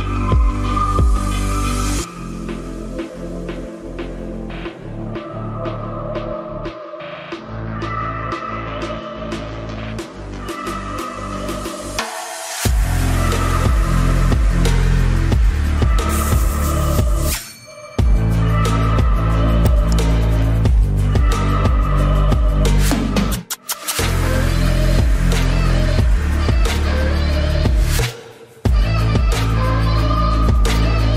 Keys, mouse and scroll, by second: 0.7 right click, 2.2 z, 2.9 z, 3.3 c, 19.0 KP_Decimal, 19.4 ctrl+s, 22.7 z, 23.4 z, 27.7 c, 29.9 i.